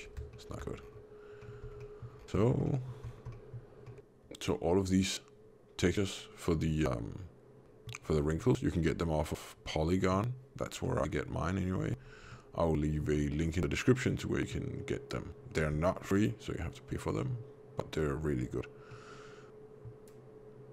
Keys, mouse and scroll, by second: 0.2 shift+middle click, 0.7 scroll down 1, 1.3 middle click, 1.3-2.1 scroll down 5, 1.7 middle click, 2.6 middle click, 2.6-3.1 scroll down 4, 3.2 middle click, 3.7 middle click, 3.8 scroll down 1, 3.9 alt+a, 7.5 middle click, 7.9 scroll up 1, 8.2 middle click, 8.8-9.5 scroll down 1, 9.5 middle click, 10.7 middle click, 11.9-12.3 scroll up 2, 12.2 middle click, 13.3 scroll down 2, 13.7 middle click, 16.1 middle click, 19.0 middle click, 20.4 scroll up 1.